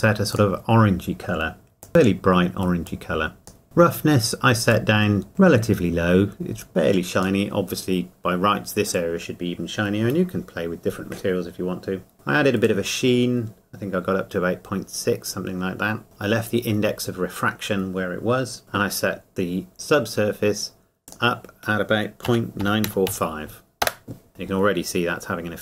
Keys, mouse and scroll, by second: 3.6 shift+middle click, 4.7 click, 12.1 shift+middle click, 12.6 click, 16.0 shift+middle click, 18.6 shift+middle click, 21.0 click, 22.3 KP_Decimal.